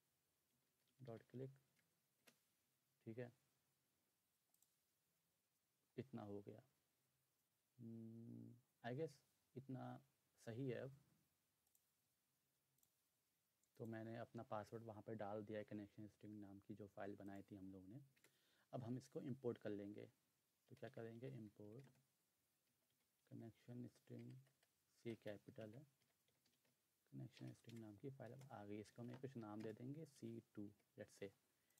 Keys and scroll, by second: 0.2-2.2 typing, 18.2 Return, 20.5-27.1 typing, 27.4 Down, 27.7 Return, 28.3-30.8 typing.